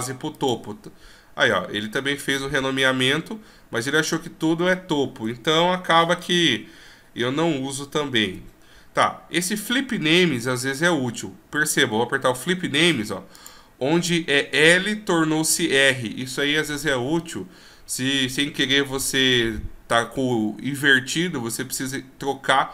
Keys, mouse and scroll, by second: 6.4 ctrl+z, 8.4 w.